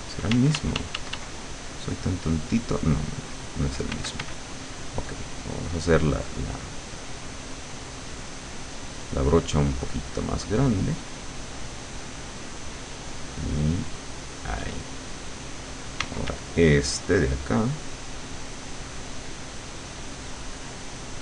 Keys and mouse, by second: 0.4 d, 1.4-4.0 drag, 4.0 f, 4.4-9.0 drag, 9.6-12.6 drag, 13.2-15.3 drag, 16.0 d, 16.5-21.2 drag.